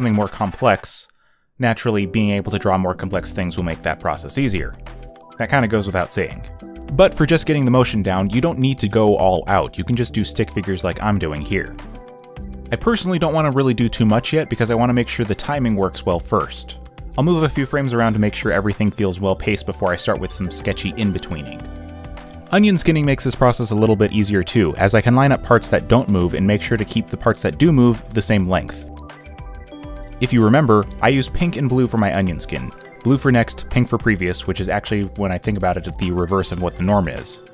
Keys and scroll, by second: 0.1 ctrl+z, 1.1-2.9 typing, 4.0 ctrl+z, 5.4 ctrl+z, 7.2 ctrl+z, 8.1 ctrl+z, 8.7 ctrl+z, 9.1 a, 9.5 v, 10.3 b, 11.1 ctrl+z, 23.7 z, 28.4 ctrl+z, 29.6 ctrl+z, 31.4 z, 32.0 v, 35.9 space, 36.5 ctrl+z, 37.3 ctrl+z.